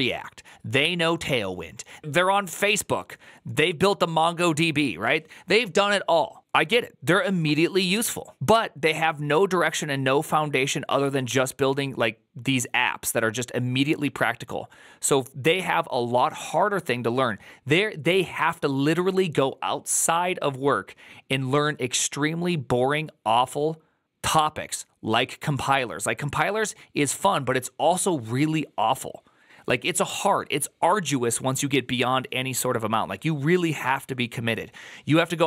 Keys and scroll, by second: 2.0 ctrl+z.